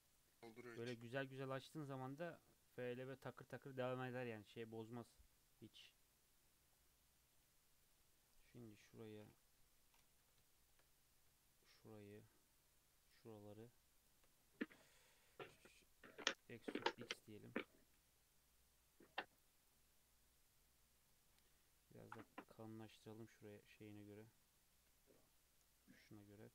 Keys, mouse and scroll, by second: 1.0 2, 1.5 click, 1.7 e, 4.9 scroll down 1, 5.0 scroll up 1, 5.2 2, 5.5 scroll down 2, 6.4-6.7 scroll down 3, 6.7-7.8 middle drag, 7.8 alt+click, 8.4-9.5 middle drag, 9.5 KP_3, 9.9-10.5 scroll up 1, 10.5 shift+middle click, 11.0 scroll up 1, 12.0 shift+click, 13.0 shift+click, 14.0 shift+click, 14.9 KP_3, 15.2-16.3 middle drag, 16.3 e, 17.6 Tab, 17.9 alt+z, 18.3-19.3 middle drag, 19.3-20.0 right drag, 20.0-21.5 middle drag, 21.5 s, 22.7-23.3 middle drag, 23.3 KP_3, 23.6 KP_1, 24.7 KP_9, 25.2-26.1 scroll up 2, 26.4 Tab.